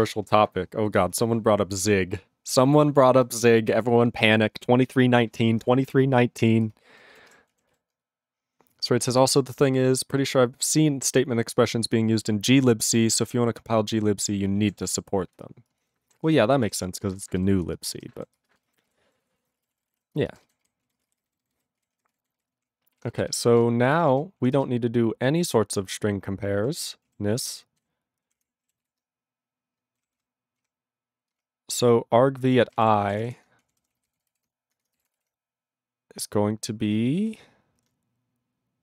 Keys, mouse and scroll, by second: 6.7 ctrl+space, 7.2 ctrl+alt+b, 7.3 ctrl+g, 7.7 ctrl+s, 14.8 ctrl+s, 15.7 ctrl+space, 16.1 ctrl+alt+f, 16.3 ctrl+g, 16.7 ctrl+s, 16.8 ctrl+space, 17.3 ctrl+alt+b, 17.4 ctrl+g, 17.7 ctrl+space, 18.1 ctrl+alt+f, 18.2 ctrl+g, 18.4 ctrl+space, 18.8 ctrl+alt+b, 18.9 ctrl+g, 19.2 ctrl+s, 19.4 ctrl+a, 19.4 ctrl+n, 19.5 ctrl+space, 19.6 ctrl+e, 19.6 ctrl+n, 19.7 ctrl+e, 19.9 ctrl+n, 19.9 ctrl+e, 19.9 ctrl+g, 20.2 ctrl+space, 20.6 ctrl+alt+b, 20.9 ctrl+a, 21.0 ctrl+space, 21.2 ctrl+n, 21.3 ctrl+n, 21.5 ctrl+n, 21.8 ctrl+g, 22.1 ctrl+s, 22.2 ctrl+n, 22.4 ctrl+n, 22.6 ctrl+p, 22.9 ctrl+e, 23.3 alt+b, 23.9 ctrl+a, 24.0 ctrl+n, 24.1 ctrl+space, 24.4 ctrl+p, 24.6 ctrl+space, 24.7-25.5 ctrl+n, 26.1 ctrl+n, 26.6 ctrl+n, 26.8 ctrl+e, 27.1 ctrl+a, 27.4 ctrl+n, 27.8 ctrl+w, 28.4 Tab, 28.9 ctrl+s, 30.1 ctrl+/, 30.2 ctrl+/, 30.7 ctrl+/, 31.3 ctrl+space, 31.4-32.4 ctrl+p, 32.6 ctrl+n, 32.7 ctrl+g, 32.8 ctrl+e, 33.0 ctrl+a, 33.2 ctrl+o, 33.2 Tab, 33.6-34.9 typing, 35.4 ctrl+e, 37.3 ., 37.9 BackSpace.